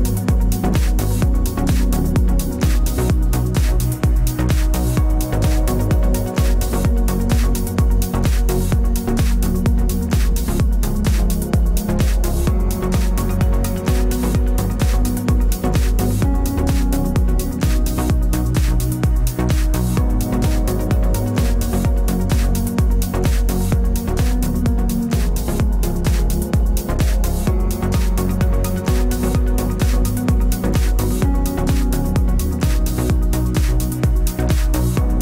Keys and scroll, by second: 4.9 Return.